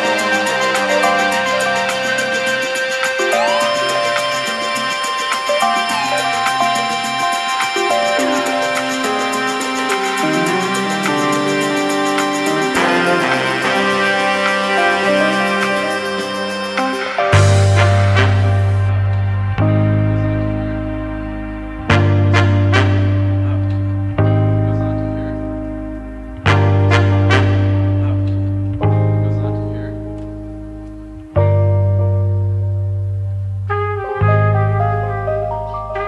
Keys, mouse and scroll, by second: 0.5-1.9 scroll down 1, 2.0 click, 3.0-4.1 drag, 4.5-5.6 shift+middle drag, 5.6 g, 5.7 z, 7.0 click, 7.2 Tab, 7.5 a, 8.0 s, 9.0 g, 11.8 Tab, 12.1-12.8 middle drag, 12.8-14.1 scroll down 3, 14.1 s, 17.0 click, 17.6-19.6 drag, 19.9-20.5 scroll up 3, 20.5-20.9 middle drag, 20.9 Tab, 21.2-22.7 scroll down 2, 22.7 g, 26.3 middle click, 27.2 g, 30.3 r, 33.8 g.